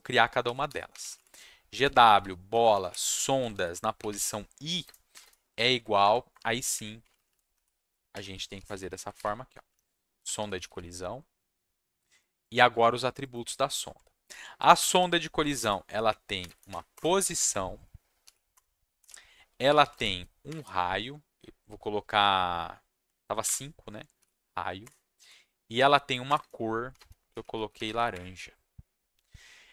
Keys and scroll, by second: 0.2-5.6 typing, 6.0 Left, 6.3 Return, 6.7 Up, 7.1 Left, 7.3 Left, 7.5 Right, 7.8-11.2 typing, 9.7 Left, 13.8 Tab, 14.3-16.7 typing, 16.9 Return, 17.4 Down, 18.2-21.0 typing, 18.5 Return, 23.4 5, 24.2 ,, 24.8 Return, 25.2 ., 26.2 Return, 26.6-28.2 typing.